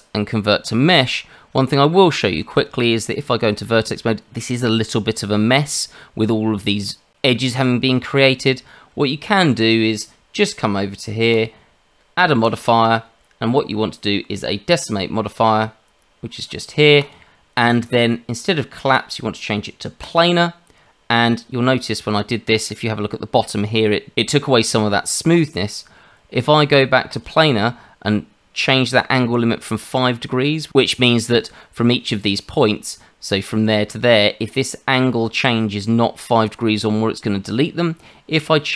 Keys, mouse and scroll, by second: 1.2-1.8 scroll up 2, 1.8 scroll down 1, 2.1 shift+middle click, 2.4 scroll down 1, 2.6 Tab, 8.9 Tab, 11.3 click, 20.0 click, 27.1 click, 32.2 Tab, 38.3 click.